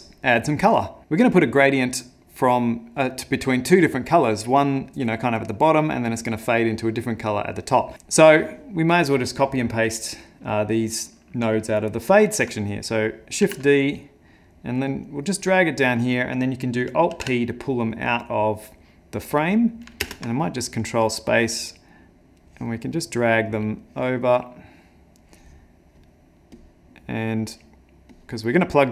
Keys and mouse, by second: 0.4 click, 13.4 shift+d, 15.4 middle click, 17.1 alt+p, 17.9 click, 19.6 middle click, 20.0 ctrl+space, 20.6 middle click, 21.1 middle click, 22.4 click, 22.9 middle click, 23.8 click, 24.3 middle click, 25.2 click, 26.5 click, 27.4 click, 28.1 click, 28.8 click.